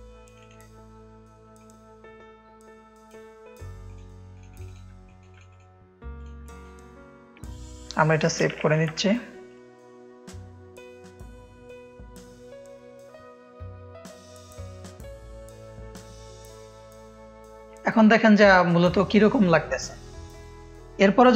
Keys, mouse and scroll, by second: 0.2 click, 1.5-3.0 drag, 3.8-4.5 drag, 5.0 click, 5.0 space, 5.4 click, 6.1 click, 6.4 click, 6.5 space, 7.3 F1, 8.5 alt+f, 8.6 alt+e, 9.4 click, 10.6 click, 11.4 click, 12.0 click, 12.3 click, 12.6-14.4 typing, 14.6 Return, 17.1 click, 21.0 F1.